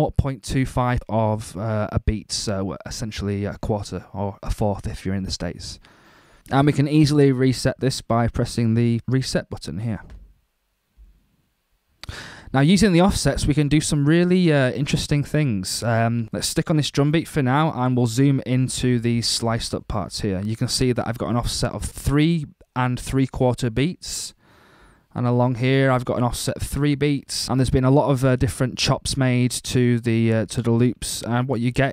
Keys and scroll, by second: 14.1 ↺, 16.2 alt+super+Down, 18.5 alt+super+Up.